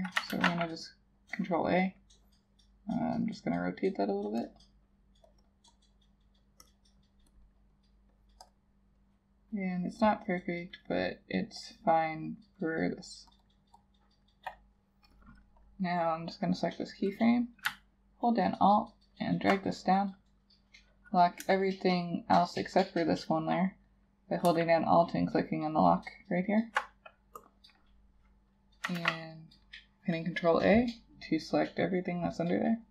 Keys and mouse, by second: 0.4 ctrl+a, 5.5 double click, 18.4 alt+click, 25.1 alt+click, 29.0 ctrl+a.